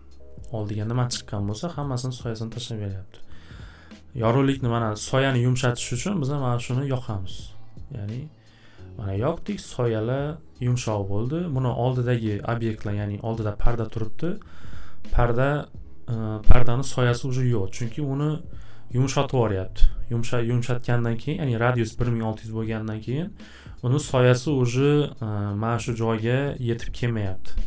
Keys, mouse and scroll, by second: 0.8 middle click, 0.8 scroll, 1.8 scroll, 6.6 click, 21.1 click, 21.3 click.